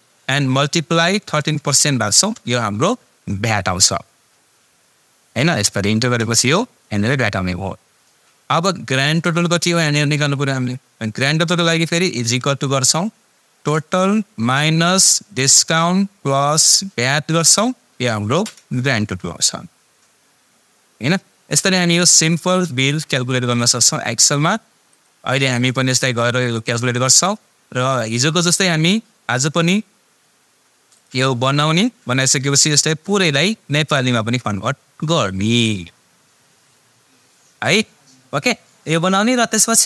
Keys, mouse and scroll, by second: 1.8 shift+0, 2.1 shift+5, 12.3 =, 13.6 click, 16.3 click, 22.6-23.6 click.